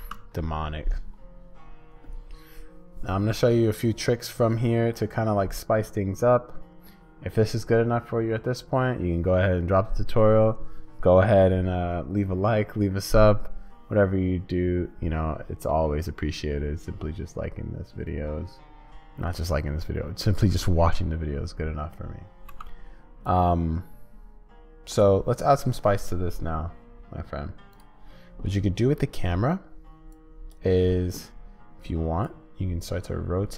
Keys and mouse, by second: 0.0 ctrl+space, 22.5 space.